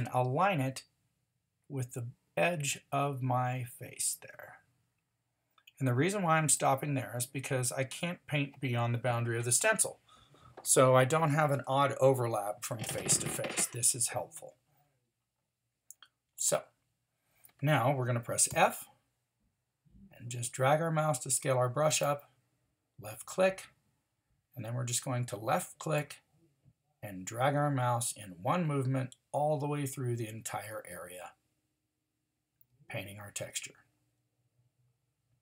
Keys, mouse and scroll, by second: 18.5 f.